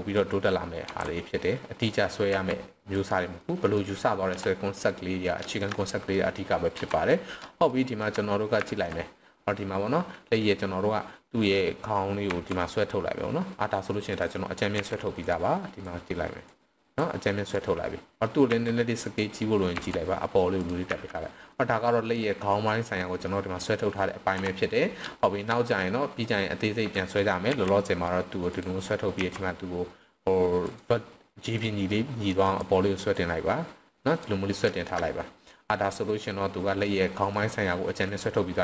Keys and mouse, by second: 0.8 e, 1.8 click, 2.3 s, 2.9 drag, 3.4-3.8 middle drag, 4.3 KP_1, 5.5 shift+middle click, 5.7-6.1 middle drag, 7.7-8.0 shift+middle drag, 8.6 z, 12.3 e, 14.1 drag, 14.8 r, 15.2 drag, 15.8-16.5 drag, 17.0-17.5 drag, 18.4 s, 19.0 drag, 19.7 e, 20.6 drag, 20.8 z, 21.5-22.4 middle drag, 23.1-23.7 middle drag, 24.2 KP_3, 25.2 shift+middle click, 26.3-26.9 drag, 28.5 drag, 28.5 r, 29.2 r, 30.6 click, 31.5-32.6 drag, 33.1-34.2 drag, 34.8 shift+middle click, 35.9-36.8 middle drag, 37.3-38.0 middle drag.